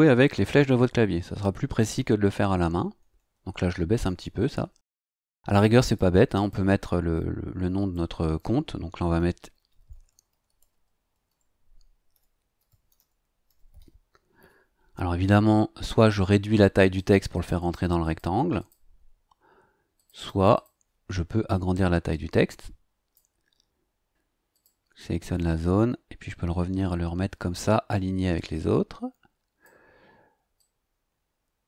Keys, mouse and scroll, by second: 1.2 Down, 5.5 click, 6.4 click, 7.1 click, 9.2-13.8 typing, 16.9 click, 17.3 click, 18.0 click, 18.6 click, 20.0 click, 22.1-23.3 drag, 24.1 click, 24.5 click, 25.4-29.8 drag, 30.6-31.6 drag.